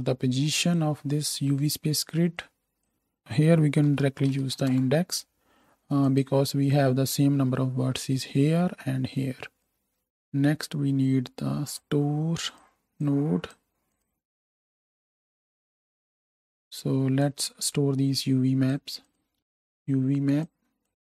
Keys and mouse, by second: 0.7-2.3 drag, 6.1 click, 10.0 shift+a, 12.6-13.0 drag, 20.9 x.